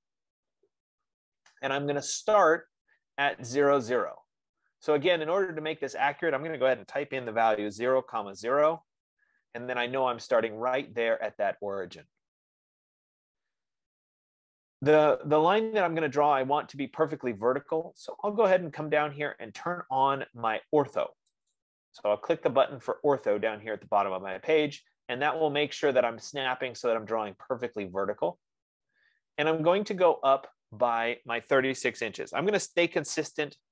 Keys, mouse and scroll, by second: 0.1-4.9 drag, 6.1 F15, 7.2-7.7 typing, 8.9 Return, 8.9 typing, 21.8-26.9 drag, 32.2-33.1 typing, 33.4 Return.